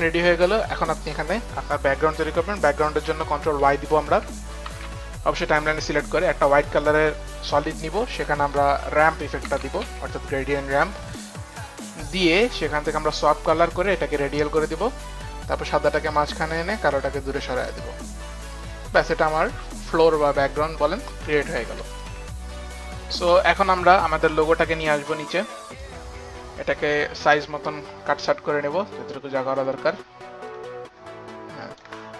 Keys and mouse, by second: 3.0 ctrl+y, 3.0 click, 3.9 ctrl+y, 3.9 click, 3.9 click, 4.3 ctrl+y, 9.1-10.3 typing, 11.5 click, 12.8-13.6 typing, 13.1 click, 15.6 click, 17.2 click, 19.3 click, 19.8 click, 21.4 shift+click, 23.6 click, 24.5 click, 27.8 click, 28.4 click, 28.8 click, 30.9 shift+click.